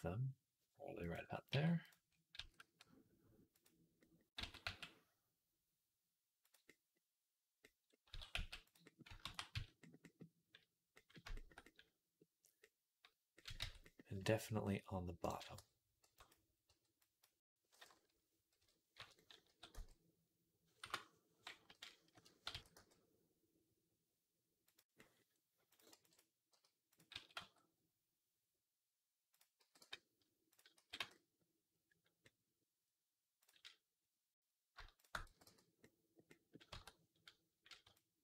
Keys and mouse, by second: 1.4 Tab, 1.7 click, 1.7-30.4 middle drag, 2.2 s, 4.2 s, 7.9 s, 9.1 ctrl+a, 13.4 Tab, 15.9 b, 16.5 b, 18.4 ,, 19.3 s, 21.5 ., 22.3 s, 25.8 b, 26.4 g, 27.0 s, 30.0 x, 30.4 click, 30.6-33.2 middle drag, 30.6 x, 33.2 click, 33.3-34.8 middle drag, 34.8 shift+click, 34.9-37.8 shift+middle drag, 35.1 x, 36.6 Tab, 37.8-38.2 shift+drag.